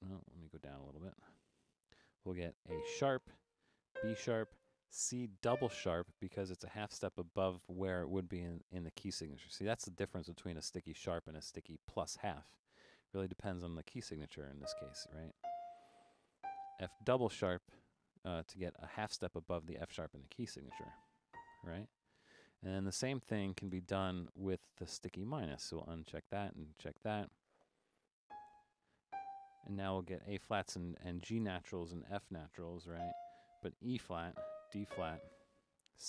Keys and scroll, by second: 0.2 BackSpace, 0.7 Down, 0.9 Down, 1.0 Down, 1.4 Down, 1.5 Down, 1.6 Down, 1.7 Down, 2.1 Down, 2.4 Up, 2.7-4.4 typing, 5.5 c, 14.7-16.4 typing, 20.8-23.7 typing, 28.3-29.6 typing, 32.9 f, 34.1-34.9 typing.